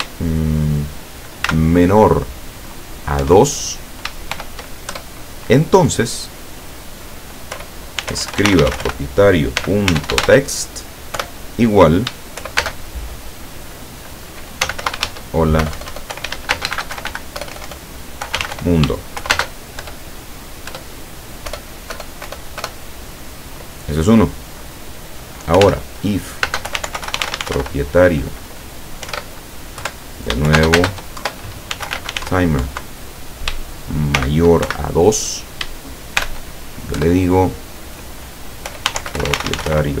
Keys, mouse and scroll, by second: 1.5 shift+,, 3.3 KP_2, 4.3 shift+;, 5.0 shift+Return, 7.6-8.8 typing, 9.9-11.1 typing, 12.6 shift+space, 14.7-17.1 typing, 18.4 n, 18.5 d, 18.6 o, 19.4 shift+space, 19.9 shift+Return, 20.8 Return, 21.5 BackSpace, 25.6-27.7 typing, 29.1 [, 29.9 Left, 30.6 shift+space, 31.2 shift+Left, 31.8 shift+t, 32.0 m, 32.2 e, 32.2 r, 32.7 End, 34.2 shift+., 34.7 shift+2, 36.2 shift+;, 37.0 Return, 38.7-40.0 typing.